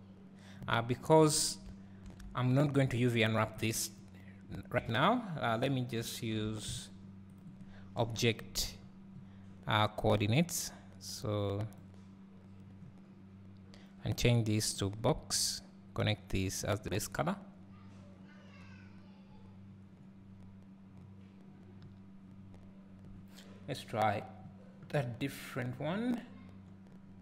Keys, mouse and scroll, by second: 0.8 click, 3.5 click, 7.4 click, 12.8-21.8 drag, 20.2 scroll up 1.